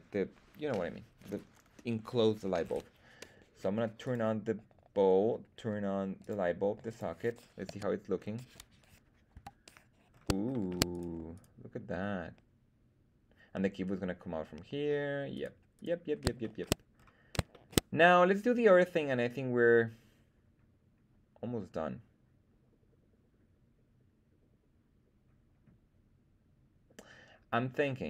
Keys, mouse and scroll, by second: 4.1 click, 6.1 click, 6.8 click, 7.7 z, 8.1-9.3 scroll down 2, 9.3 KP_1, 10.0-10.4 scroll up 2, 10.5 shift+middle drag, 10.9 right click, 11.3 right click, 15.3 right click, 15.7 right click, 16.4 shift+middle drag, 16.9-17.4 scroll up 2, 17.5 shift+middle drag.